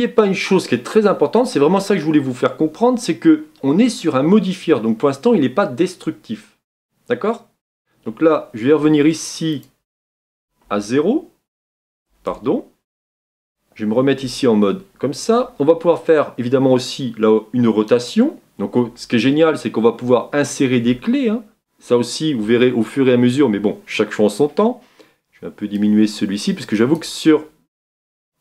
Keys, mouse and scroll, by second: 12.3-16.3 drag, 16.3 Tab, 25.9-28.4 drag.